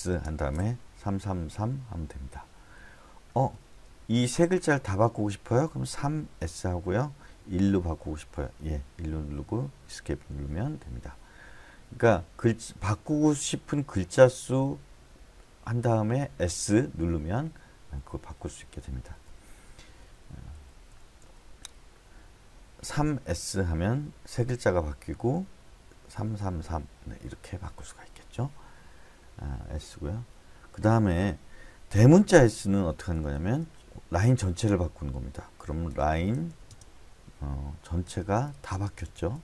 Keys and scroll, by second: 1.0 3, 1.2 3, 1.5 3, 1.9 Escape, 3.3 h, 3.7 h, 5.8-6.4 typing, 7.6 1, 9.8 Escape, 18.8-21.7 typing, 22.9 3, 23.2 s, 26.1 3, 26.4 3, 26.6 3, 27.7 Escape, 33.3 typing, 35.7-36.9 typing, 38.0-39.4 typing.